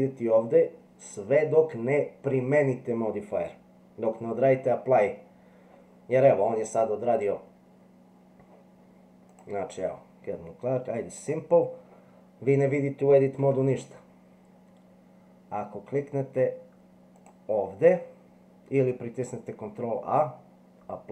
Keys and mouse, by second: 9.3 click, 11.2 click, 13.4 Tab, 17.2-21.1 drag.